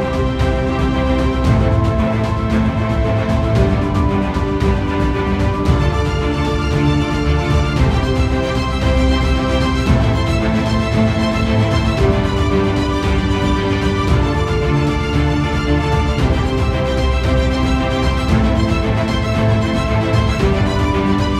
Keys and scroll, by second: 6.9 ctrl+z.